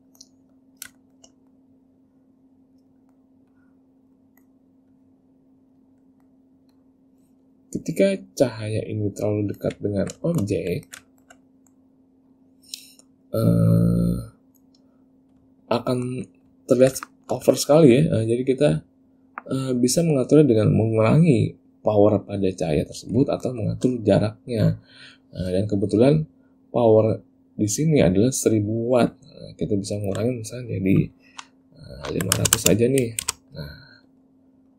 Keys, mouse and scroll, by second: 0.2 middle click, 1.1 shift+middle click, 1.5 middle click, 2.1 click, 3.1 middle click, 3.7 click, 4.3 middle click, 5.1 click, 6.1 middle click, 6.9 click, 8.2 click, 9.5 middle click, 10.0 ctrl+middle click, 10.8 ctrl+middle click, 11.2 shift+middle click, 11.6 middle click, 12.5 click, 13.8 click, 15.7 ctrl+middle click, 16.8 ctrl+middle click, 17.3 shift+middle click, 17.7 ctrl+middle click, 23.4 ctrl+middle click, 24.7 click, 30.1 click, 32.7 KP_0.